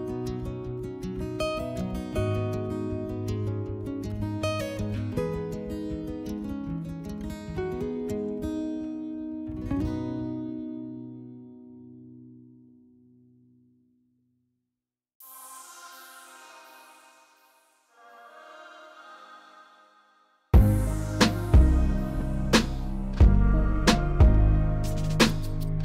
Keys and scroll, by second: 0.1 2, 2.8 2, 16.8 s, 25.3 s.